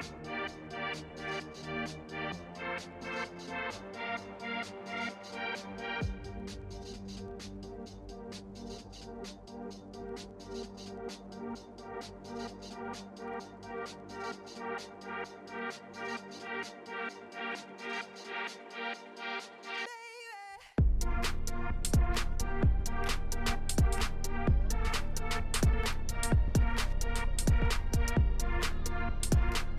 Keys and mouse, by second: 1.0 click, 1.4 click, 4.4 shift+click, 6.2 click, 6.8 click, 7.6 click, 7.9-8.7 drag, 8.9 click, 9.0 click, 9.4-10.7 middle drag, 10.8 click, 11.8 click, 12.0 shift+drag, 12.4 click, 12.6 click, 13.4-13.7 shift+drag, 14.2 shift+click, 14.9-15.4 drag, 15.9 click, 16.1 click, 17.1 click, 17.8 click, 18.2 shift+click, 18.5 middle click, 18.9 drag, 22.1 click, 23.2 shift+click, 24.1-24.8 drag, 25.7-26.1 right drag, 26.7 click, 26.9 middle drag, 29.1 click, 29.5 click.